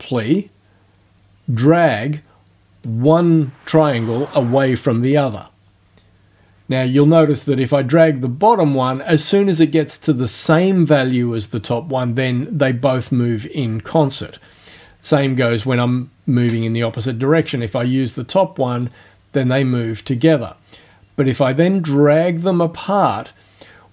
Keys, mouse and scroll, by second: 8.0-14.5 drag, 17.4-23.9 drag.